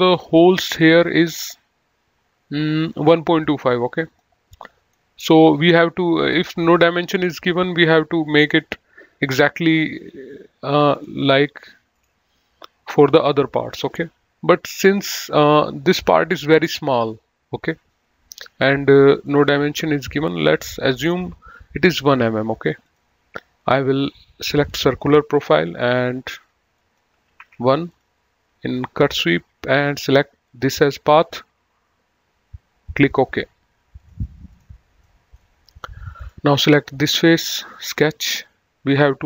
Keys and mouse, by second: 4.3 click, 19.4 click, 20.7 click, 23.2 click, 24.9 click, 26.3 1, 27.1 click, 27.5 1, 27.7 Tab, 28.1 click, 30.7 click, 34.2 click, 35.4 middle click, 36.4 click, 38.1 click.